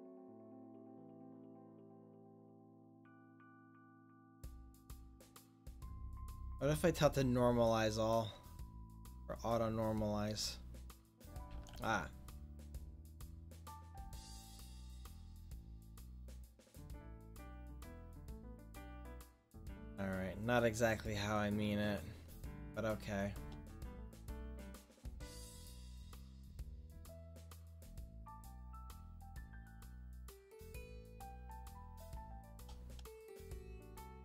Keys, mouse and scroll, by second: 9.0-10.0 drag, 11.8 ctrl+z, 17.6 click, 22.7-24.3 drag, 24.3 ctrl+z, 29.3-32.3 drag, 32.3 click, 32.3-33.9 middle drag, 34.0 middle click.